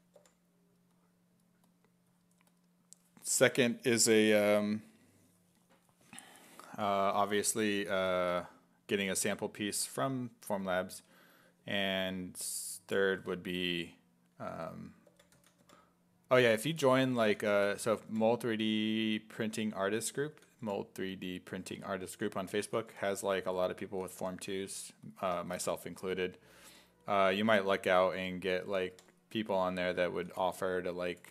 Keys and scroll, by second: 0.2 5, 14.5-18.6 typing, 20.3 s, 20.7 5, 22.6 s, 22.9 5, 23.9 s, 24.2 1, 26.5 1, 27.7-31.3 typing.